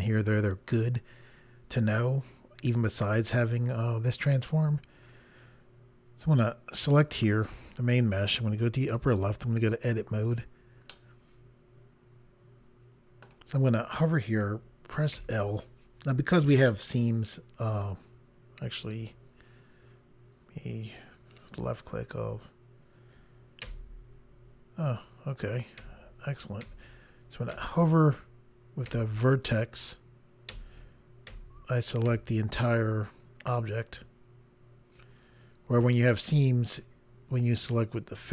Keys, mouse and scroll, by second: 6.2 click, 8.8 click, 9.7 click, 10.9 middle click, 18.8 click, 21.5 click, 23.6 i, 25.8 i, 26.6 i, 27.5 i, 28.9 i, 30.5 i, 31.3 i, 36.3 i.